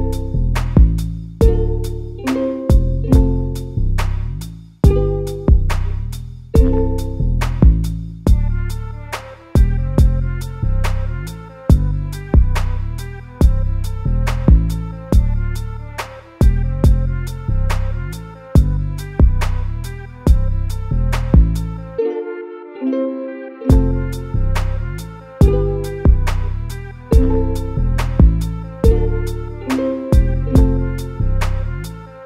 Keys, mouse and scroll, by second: 0.6 Tab, 1.2-1.6 scroll down 2, 1.6-2.4 middle drag, 2.4-3.9 right drag, 3.9-6.4 middle drag, 6.4-7.0 drag, 7.0-7.6 middle drag, 7.6-8.5 scroll down 2, 8.5 KP_Divide, 9.3-12.5 middle drag, 13.0-14.3 scroll down 1, 14.3-17.4 drag, 18.6 click, 19.8-22.6 drag, 25.0 ctrl+r, 26.8 KP_Divide, 27.7-29.1 middle drag, 29.1-30.2 scroll up 2, 30.2-32.2 shift+drag.